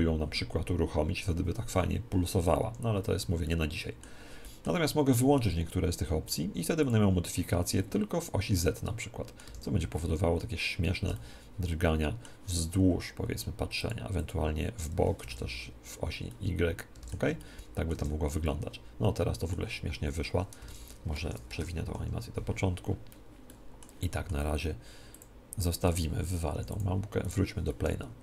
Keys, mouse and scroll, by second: 2.7 Escape, 3.4 middle click, 4.6-6.2 middle drag, 6.2-8.7 drag, 8.7 middle click, 9.5 alt+a, 10.9 alt+a, 11.1-13.7 middle drag, 13.7-16.0 drag, 15.3 alt+a, 15.9 alt+a, 16.3-20.3 middle drag, 17.9 alt+a, 18.9 alt+a, 20.7 alt+a, 21.1 Escape, 21.9 shift+Left, 23.5-25.1 middle drag, 25.1 click, 26.5 x, 27.7-28.2 middle drag.